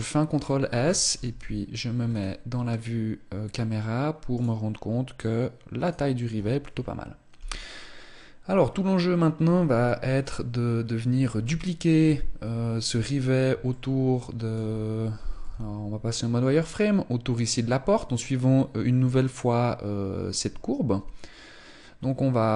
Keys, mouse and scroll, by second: 0.0-0.6 scroll down 4, 0.9 KP_0, 1.8 scroll down 2, 2.4 scroll up 1, 4.0 right click, 5.6 right click, 11.8 KP_1, 12.8-13.4 scroll down 3, 13.4 shift+middle click, 14.8 z, 22.4 right click.